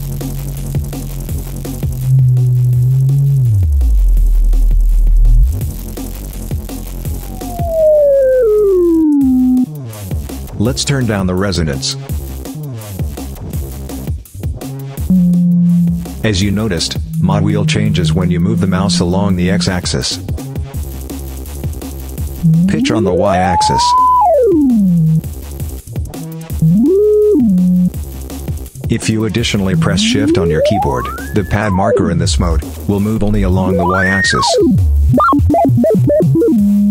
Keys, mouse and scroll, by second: 10.6 click, 11.6 click, 12.4-13.9 drag, 14.9-20.3 drag, 22.1-25.1 drag, 26.4-27.8 drag, 29.5-32.5 shift+drag, 32.9-36.9 drag.